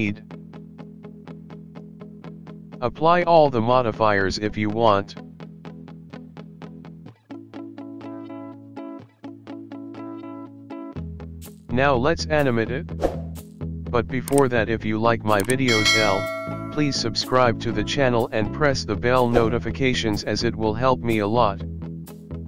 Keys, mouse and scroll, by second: 0.2 click, 0.4 middle click, 0.8 KP_1, 0.9-1.3 scroll down 5, 1.2 middle click, 2.0 click, 2.4 n, 2.9 click, 3.2 click, 3.3 click, 4.0 ctrl+s, 5.0 click, 5.6 KP_1, 5.9 click, 6.3 click, 6.5 click, 7.2 click, 7.5 click, 7.8 click, 9.0 middle click, 9.9 middle click, 11.6 KP_1, 12.9 click.